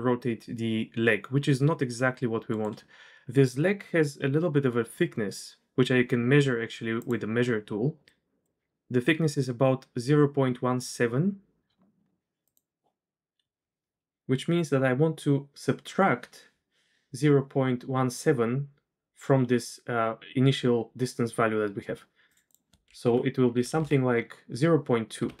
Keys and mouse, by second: 8.4 typing, 11.1-12.6 typing, 12.4 click, 22.4-25.4 drag, 23.7 BackSpace, 23.8 BackSpace.